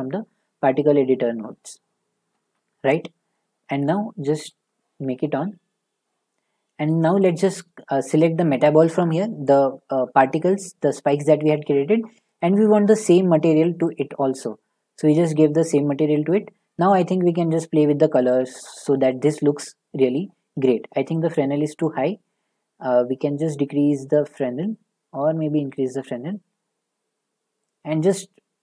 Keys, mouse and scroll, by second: 2.9 click, 2.9 middle click, 5.6 click, 6.7 middle click, 13.9 click, 15.3 click, 15.5 click, 15.7 click, 18.5 middle click, 19.2 shift+middle click.